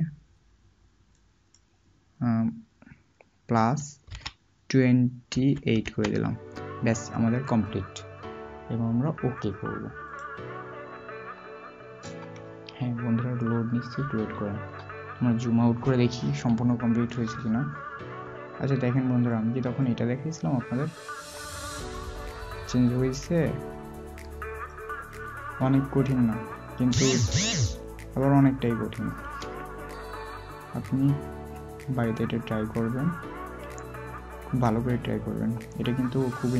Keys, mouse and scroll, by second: 10.1 typing, 17.2 alt+scroll down 1, 20.8 alt+scroll down 1, 21.0 double click, 21.5 alt+scroll up 1, 24.2 double click, 29.1 click, 29.4 alt+scroll down 1, 31.1 alt+scroll up 1, 33.8-34.4 scroll up 1, 34.4 alt+scroll, 34.5-35.0 alt+scroll down 1, 36.4-36.5 alt+scroll up 1.